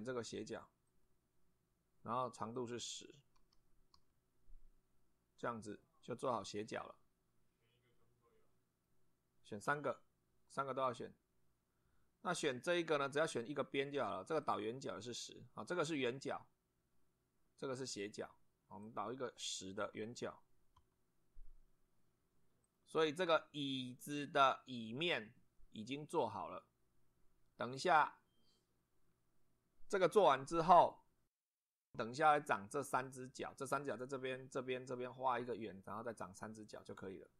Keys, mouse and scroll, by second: 0.9 click, 2.5 click, 3.4 1, 3.9 0, 5.7 click, 6.5-9.0 middle drag, 14.4 click, 18.8 click, 19.8 1, 20.8 0, 22.6 click, 26.2 click, 32.5-33.3 middle drag.